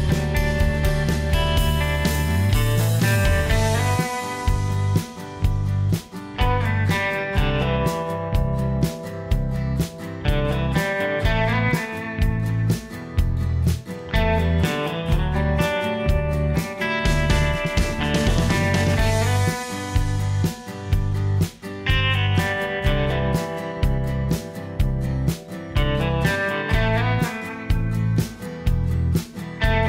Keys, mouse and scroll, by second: 9.6 F2, 28.8 s.